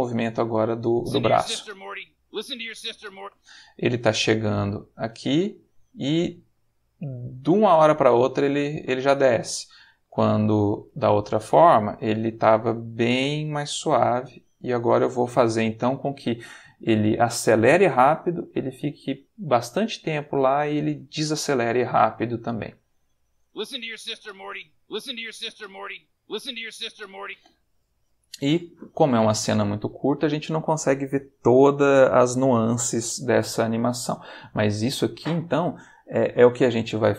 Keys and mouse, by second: 0.9 space, 3.2 space, 3.9-10.4 drag, 10.9 click, 11.4 s, 14.4 click, 22.0-23.3 drag, 23.4 space, 27.2 space.